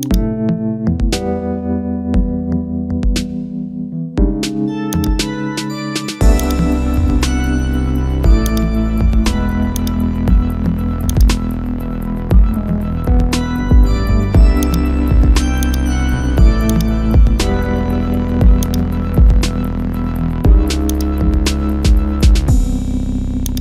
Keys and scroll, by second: 5.7 ctrl+z, 9.4 ctrl+z, 16.2 ctrl+z.